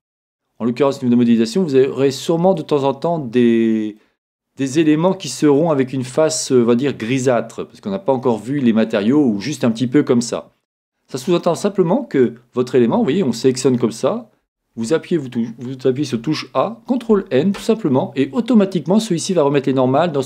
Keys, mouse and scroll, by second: 1.8-5.9 middle drag, 1.8-2.7 scroll up 1, 6.5-8.2 scroll down 1, 8.2-10.9 scroll down 1, 10.9-13.0 middle drag, 13.0 Tab, 14.5 a, 14.7 a, 16.9 ctrl+n.